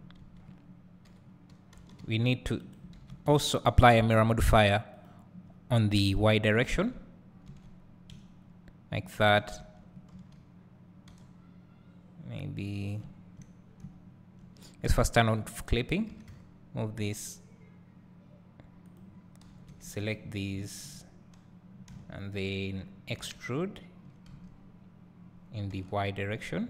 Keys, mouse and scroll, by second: 0.2 a, 1.1 g, 2.7 right click, 3.0 ctrl+z, 3.4 Tab, 5.0 click, 9.6 Tab, 10.2 a, 11.1 y, 13.8-15.2 right drag, 15.2 click, 16.2 g, 19.5 2, 20.1 alt+click, 23.2 e.